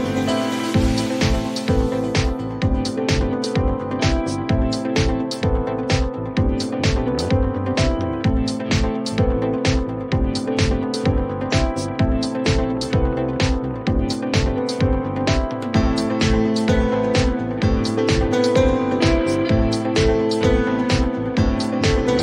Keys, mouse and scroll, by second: 15.9-17.0 typing, 17.7 Return.